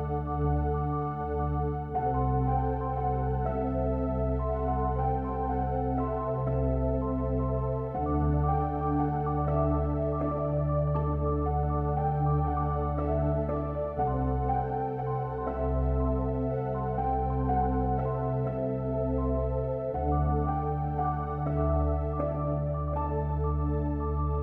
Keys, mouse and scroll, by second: 3.2-4.9 middle drag, 5.4-7.5 middle drag, 9.0-10.6 middle drag, 14.0 e, 18.6 a, 19.8 a, 21.0 Delete.